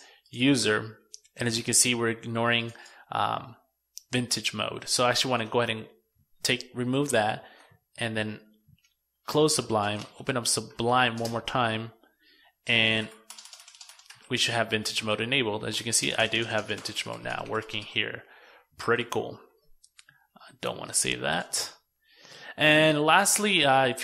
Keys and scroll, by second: 4.0 super+x, 5.7 super+s, 6.6 super+w, 8.0 super+q, 17.6 super+s.